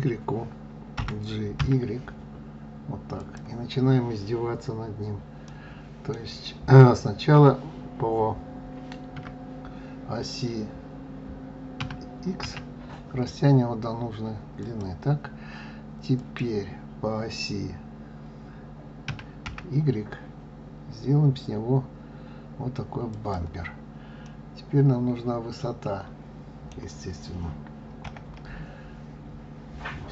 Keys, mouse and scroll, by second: 0.9 g, 5.4-8.4 middle drag, 9.1 KP_7, 11.7 s, 16.1 click, 19.0 s, 24.1-27.2 middle drag, 27.9 KP_1.